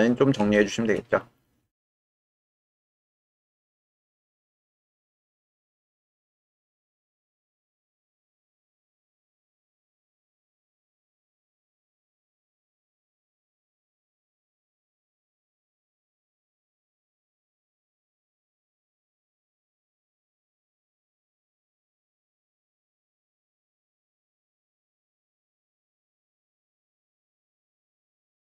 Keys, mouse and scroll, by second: 0.5 shift+click, 1.9 shift+click, 3.4 shift+click, 4.2 click, 6.1 w, 7.0 w, 8.0-10.2 drag, 12.3 g, 12.6 y, 13.5 click, 14.5 shift+click, 15.9 g, 18.4 click, 19.0 click, 19.4 g, 21.0 click, 21.7 click, 22.1 g, 22.8 click, 23.4 click, 24.8 click, 25.3 click, 25.7 g, 26.4 click, 27.2 shift+click, 27.7 click.